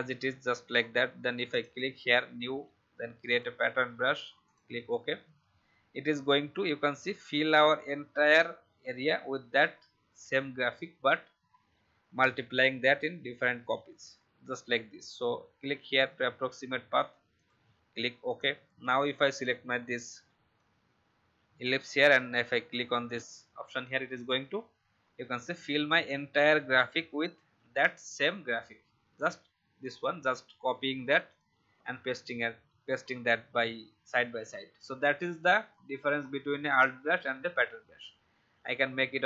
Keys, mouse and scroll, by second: 36.2-37.9 scroll down 1.